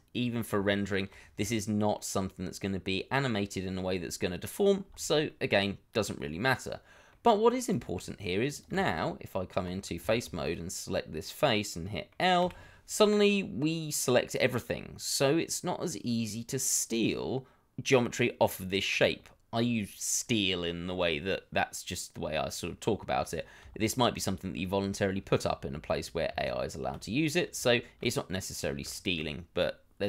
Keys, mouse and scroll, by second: 0.8-1.1 scroll down 1, 1.1 Tab, 2.0-2.4 scroll down 1, 2.4 middle click, 5.4 middle click, 7.3-8.0 scroll up 1, 8.0 middle click, 8.9 Tab, 10.0 shift+middle click, 10.7-11.8 scroll up 1, 11.8 middle click, 12.4 l, 14.7-15.2 scroll down 1, 15.2 middle click, 23.7 shift+middle click, 24.2 scroll down 1, 24.2 middle click, 26.3 Tab, 27.3 scroll down 1, 27.7 shift+middle click, 28.5-28.8 scroll up 1, 28.9 shift+middle click.